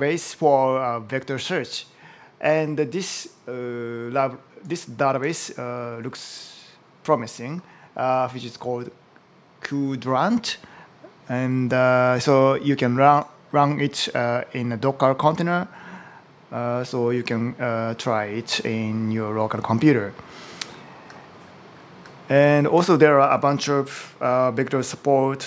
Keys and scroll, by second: 22.5 super+t.